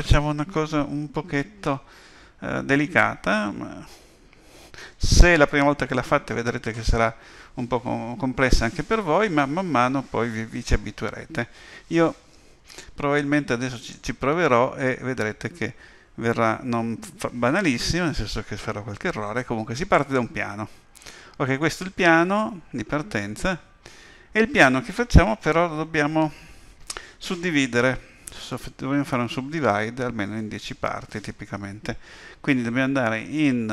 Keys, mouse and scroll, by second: 13.8 click.